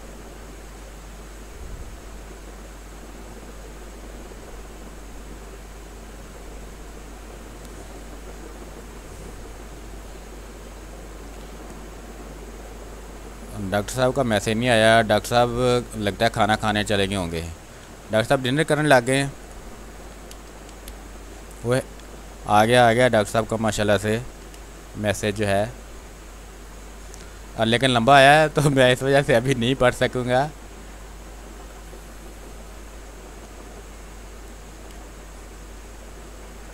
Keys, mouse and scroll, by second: 1.1 space, 1.2 click, 1.5 space, 2.3-4.8 drag, 4.8-7.4 drag, 7.4 space, 7.6 click, 8.7-16.8 drag, 16.8 space, 17.0 alt+click, 17.3 alt+click, 19.2 click, 19.9 b, 20.6 ctrl+click, 20.7 ctrl+space, 21.2 space, 21.9 ctrl+click, 23.2 r, 23.5 click, 24.1 b, 24.4 space, 24.6 click, 24.9 space, 26.0 click, 27.2 ctrl+z, 27.8 click, 28.6 space, 28.9 click, 29.1 space, 30.0-31.5 drag, 31.5 ctrl+z, 34.8 ctrl+space, 35.1 ctrl+click, 35.3 ctrl+space, 36.3 ctrl+click.